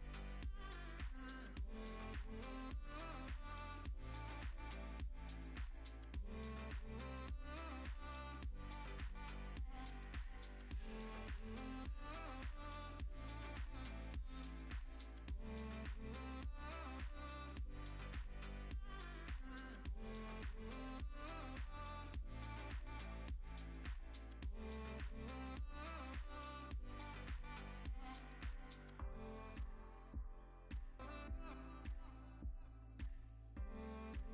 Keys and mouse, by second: 0.3 Tab, 0.4 3, 0.4 click, 0.8 z, 1.1 z, 1.5 click, 2.5-4.7 drag, 5.0 Tab, 5.4 click, 5.5 middle click, 5.7 Tab, 5.8 3, 5.9 click, 6.3 click, 7.0 click, 7.1 Tab, 7.3 click, 7.4 middle click, 7.6 middle click, 8.4 shift+a, 10.7 click, 11.7 Tab, 11.8 1, 11.9 s, 12.4 click, 12.5 Tab, 12.9 g, 13.0 x, 13.3 click, 14.5 click, 14.7 click, 16.8 ctrl+s, 18.7 click, 18.9 Tab, 19.0 3, 19.9 alt+s, 21.1 shift+d, 21.4 p, 21.6 Tab, 21.8 click, 21.9 middle click, 22.2 Tab, 22.4 a, 22.6 alt+e, 23.0 alt+e, 24.4 a, 24.4 s, 24.5 y, 25.6 click, 25.8 Tab, 26.0 ctrl+s, 26.2 click, 26.4 click, 29.1 middle click, 30.2-32.0 drag, 32.0 middle click, 32.7 KP_0, 33.0 ctrl+s.